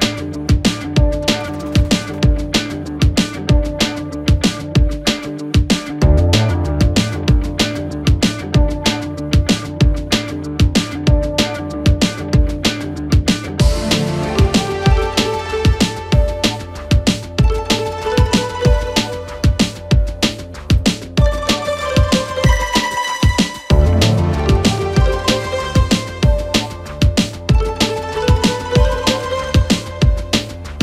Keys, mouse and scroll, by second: 2.3 s, 5.1 click, 6.8-8.8 middle drag, 8.8 2, 9.6 click, 10.4 shift+drag, 11.6 f, 12.3 KP_3, 14.1 drag, 15.1 click, 17.0 ctrl+r, 19.7 g, 22.3-22.6 scroll down 3, 22.6-23.9 middle drag, 23.9 scroll down 2, 24.0 middle click, 24.6 click, 25.3 shift+click, 26.2 shift+click, 26.7 shift+click, 27.5 KP_3, 28.1-28.5 scroll up 2, 28.5 shift+middle click, 29.2-30.8 right drag.